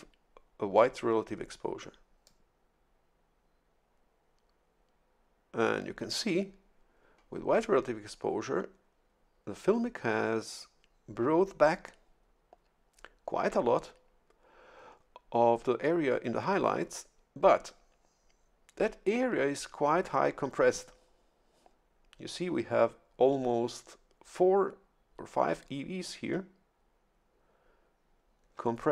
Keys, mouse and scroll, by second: 2.2-6.3 drag.